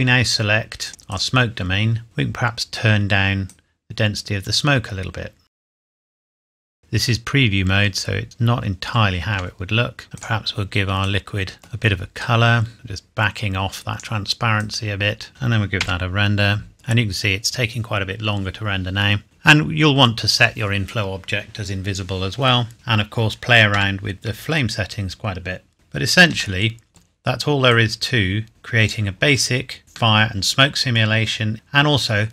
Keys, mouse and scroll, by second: 0.8 click, 1.9-2.3 scroll up 1, 3.4 click, 6.8 middle click, 8.2 scroll up 1, 9.3 KP_0, 10.0 click, 11.6 middle click, 12.2 click, 15.3 scroll down 1, 15.8 F12, 19.2-20.4 scroll up 1, 23.7 Escape, 25.7-26.1 scroll down 1, 26.5 middle click, 27.6 click, 29.8 scroll up 1, 30.1 middle click, 31.5 click.